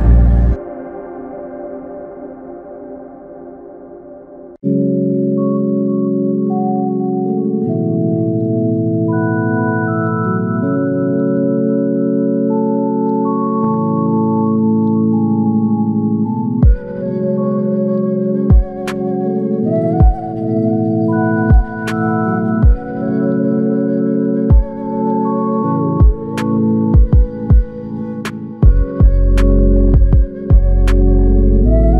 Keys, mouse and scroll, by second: 19.6 alt+click, 26.7 alt+click.